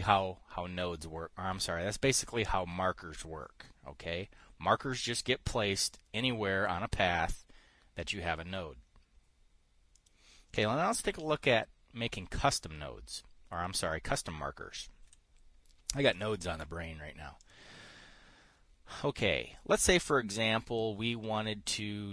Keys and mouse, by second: 10.5 click, 15.6 Delete, 17.9 click.